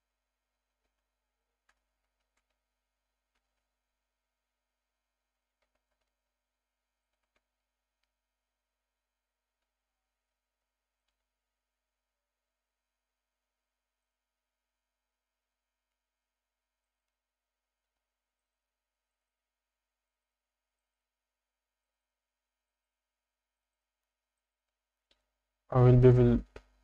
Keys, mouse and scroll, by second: 0.7 Tab, 1.0 a, 1.7 s, 2.2 shift+z, 3.6 Escape, 5.6 s, 5.8 shift+z, 7.0 shift+click, 7.3 z, 7.6 Tab, 9.6 g, 10.3 x, 11.9 Tab, 14.0 click, 16.8 click, 17.0 click, 18.4 shift+click, 19.1 shift+click, 20.0 click, 20.2 click, 20.7 shift+click, 21.8 shift+click, 22.0 shift+click, 22.7 shift+click, 22.8 shift+click, 23.5 shift+click, 23.7 shift+click, 24.3 shift+click, 24.5 shift+click.